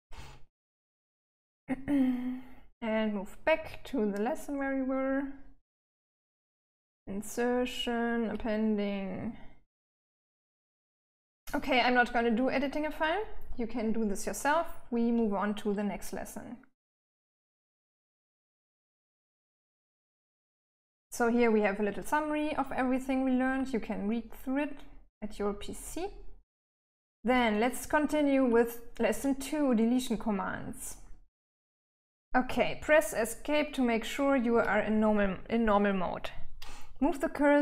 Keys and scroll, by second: 0.0-7.9 typing, 9.3-10.8 j, 11.0 j, 18.0-19.4 j, 22.7 j, 25.2-28.5 typing, 33.9 Escape.